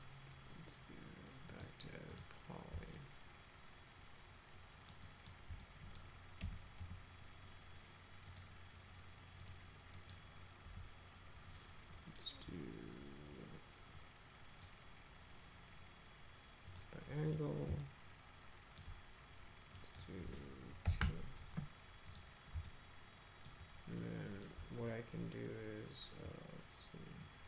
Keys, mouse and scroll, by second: 1.5 click, 2.1 click, 3.0-4.9 alt+middle drag, 5.0 alt+middle click, 5.6 middle click, 6.4 F3, 6.8 F3, 8.3 click, 9.4 click, 9.9 middle click, 10.6 F3, 13.9 click, 16.6 click, 17.2 click, 17.8 alt+middle click, 19.7 click, 20.9 2, 22.1 click, 22.6 alt+middle click, 24.0 alt+middle click, 27.2 click.